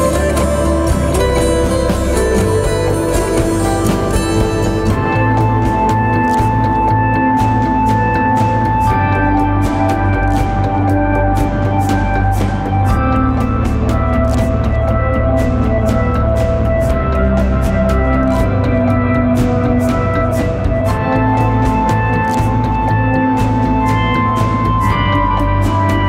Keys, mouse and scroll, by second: 13.9 alt+shift+click, 21.1 Return.